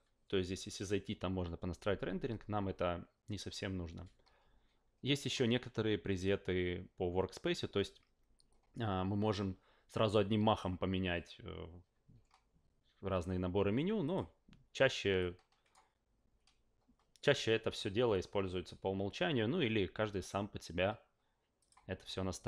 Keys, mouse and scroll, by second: 5.1 click, 10.5 click, 14.0 click, 15.2 click, 21.6 click.